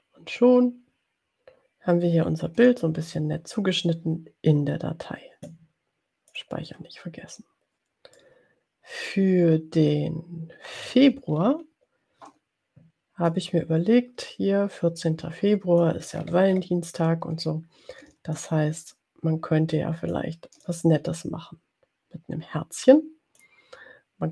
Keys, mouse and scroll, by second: 0.5 ctrl+scroll down 2, 6.6 click, 8.1-11.2 middle drag, 11.3-12.0 ctrl+scroll down 2, 12.0 ctrl+scroll down 1, 13.2-16.2 drag, 16.2-17.2 ctrl+scroll up 2, 18.4-20.3 ctrl+shift+drag, 20.6-23.6 ctrl+shift+drag.